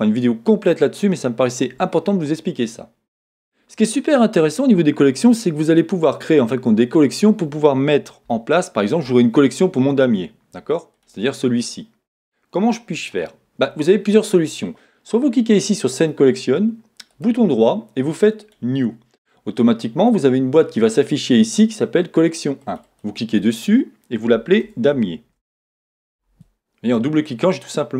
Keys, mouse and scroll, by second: 0.7 shift+middle click, 9.0-11.1 shift+scroll up 1, 11.1 click.